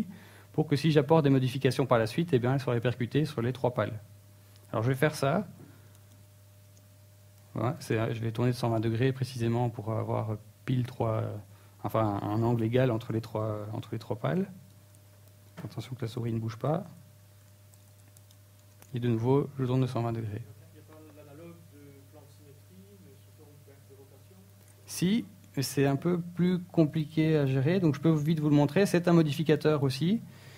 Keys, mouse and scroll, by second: 0.2 alt+d, 4.4 shift+middle click, 11.2 alt+d, 12.6 right click, 13.2 r, 15.0 r, 23.5 x, 24.6 right click, 25.3 x, 26.9 right click, 29.1 click.